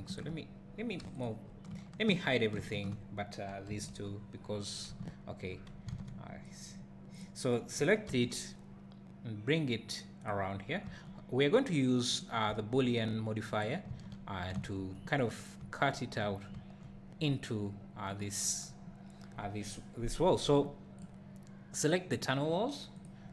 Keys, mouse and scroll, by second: 0.2 shift+click, 0.4 scroll down 1, 1.2 shift+click, 2.6 shift+h, 3.7 KP_1, 4.0 scroll up 1, 5.1 z, 5.6 scroll up 1, 5.9 alt+a, 7.2 click, 8.1 g, 10.2 click, 10.8 r, 12.2 click, 12.5 s, 13.6 click, 14.1 z, 14.5 `, 18.2 click.